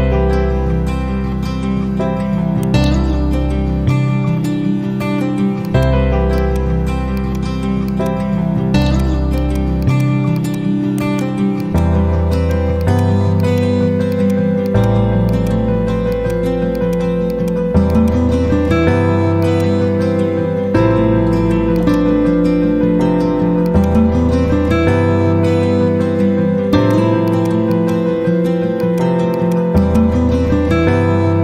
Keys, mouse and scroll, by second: 2.6 right click, 5.6 click, 10.8 right click, 11.5 click, 20.1 ctrl+z, 21.6 click, 25.5 shift+Page_Down, 26.6 click, 30.5 ctrl+z.